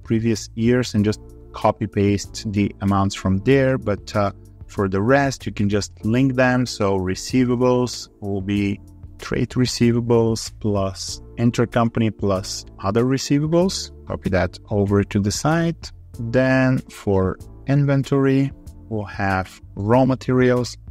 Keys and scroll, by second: 0.8 v, 14.1 ctrl+r.